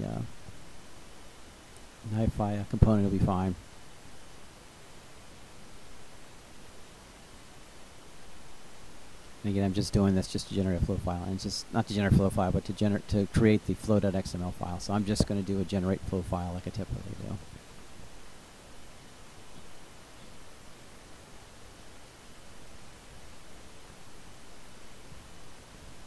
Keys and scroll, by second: 0.1 k, 0.6 b, 13.2 1.